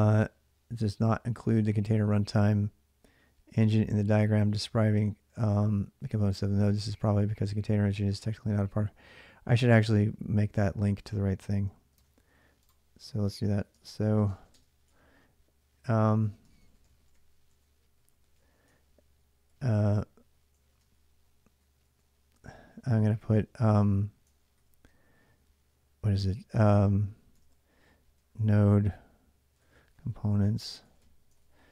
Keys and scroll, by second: 11.7 alt+Tab, 13.1-25.6 typing, 14.7 Return, 27.0-31.7 typing.